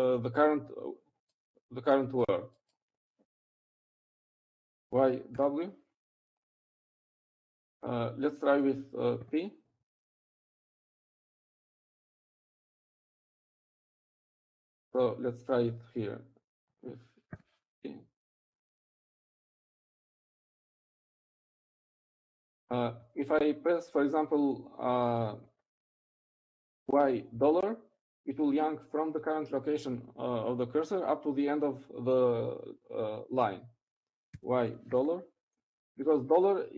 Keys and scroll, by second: 7.3-7.9 typing, 11.9 p, 15.8 u, 16.9 Down, 17.1 Down, 17.4 Right, 18.1 Right, 19.9 p, 23.9 u, 24.9 Up, 25.4 Up, 25.8 Left, 26.4 Right, 26.8 Right, 27.1 Right, 27.4 Right, 28.1 Left.